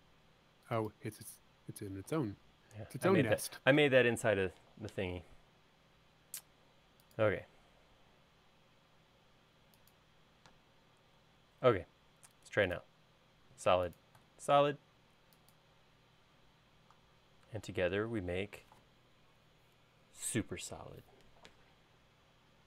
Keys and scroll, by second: 10.9 space.